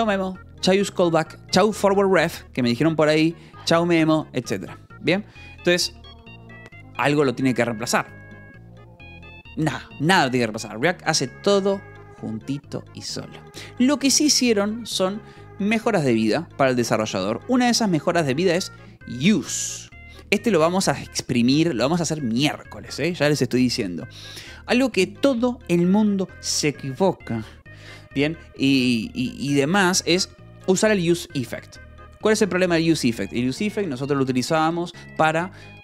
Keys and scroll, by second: 4.8 Escape, 17.9 k, 18.6 shift+v, 20.1 Escape.